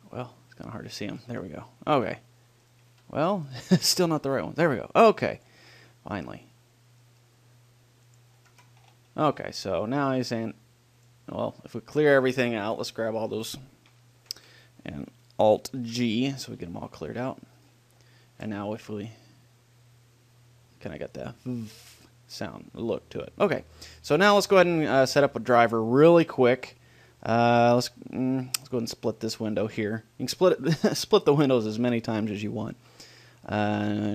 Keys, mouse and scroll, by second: 0.0-2.1 middle drag, 1.7 g, 2.1-5.7 right drag, 3.2 a, 4.5 g, 5.7 middle click, 5.9 click, 6.5-7.5 middle drag, 7.5 g, 8.5 click, 8.5 middle click, 8.7-10.1 drag, 8.9 Tab, 10.5 click, 13.1-15.7 right drag, 14.4 a, 14.6 a, 16.1 alt+g, 17.1 middle click, 17.9-18.9 drag, 18.9 right click, 19.3-21.4 drag, 28.7-33.3 drag.